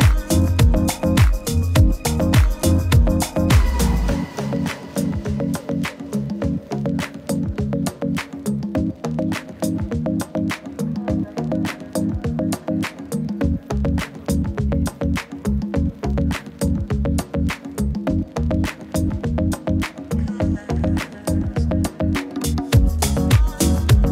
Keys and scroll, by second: 8.3 super+t, 14.4 super+d, 16.3 super+z, 21.3 super+d, 24.0 super+t.